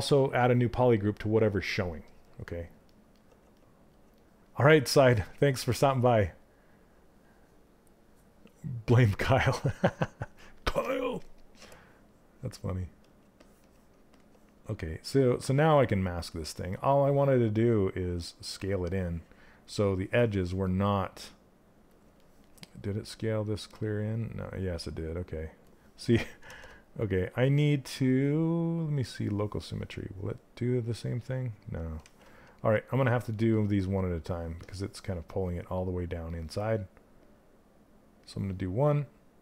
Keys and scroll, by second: 26.0 ctrl+z, 31.6 ctrl+z.